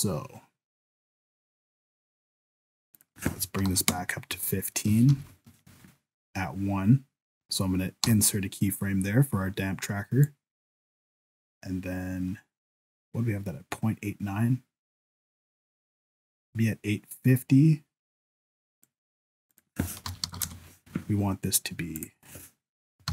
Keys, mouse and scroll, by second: 2.9 click, 5.1 shift+Left, 8.1 i, 10.2 click, 19.5 click, 22.0 click.